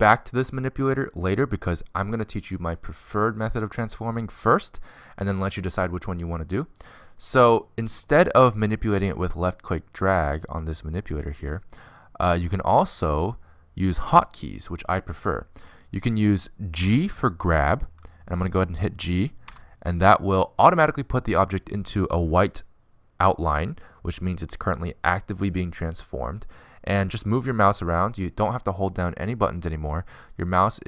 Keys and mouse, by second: 11.1-12.9 drag, 20.0 g.